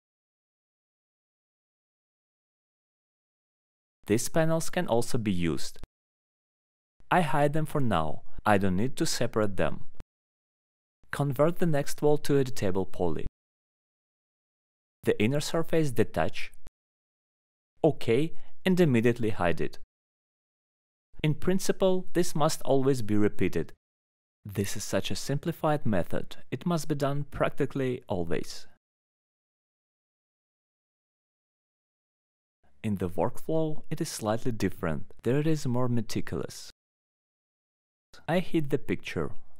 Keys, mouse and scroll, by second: 0.6 alt+middle click, 1.1 click, 2.1 middle click, 4.2 alt+middle click, 6.0 alt+middle click, 6.5 click, 7.2 alt+middle click, 8.6 click, 9.3 alt+middle click, 9.4 middle click, 10.0 middle click, 11.0 scroll up 2, 11.4 right click, 12.9 click, 13.5 scroll up 1, 14.6 click, 14.9 ctrl+click, 15.8 alt+middle click, 16.2 middle click, 18.0 click, 18.4 click, 19.5 click, 20.2 alt+middle click, 22.8 click, 24.9 middle click, 25.7 scroll, 26.3 ctrl+click, 26.6 right click, 31.2 click, 31.6 alt+middle click, 31.8 scroll down 1, 32.8 click, 34.5 alt+middle click, 36.4 click, 37.0 middle click, 37.7 alt+middle click, 38.1 click, 38.6 alt+middle click, 39.2 alt+middle click, 39.4 middle click.